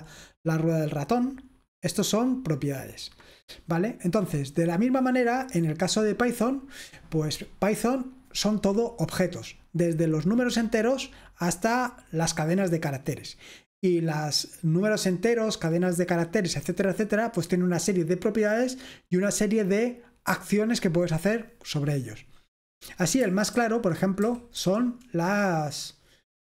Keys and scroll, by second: 5.3-9.4 scroll down 1, 9.4-10.4 scroll down 1, 10.4-12.4 scroll down 1, 12.4-15.7 scroll down 1, 15.7-17.7 scroll down 1, 17.7-20.3 scroll down 1, 20.3-21.6 scroll down 1, 21.6-23.3 scroll down 1, 23.3-23.7 scroll down 1, 23.7-24.6 typing.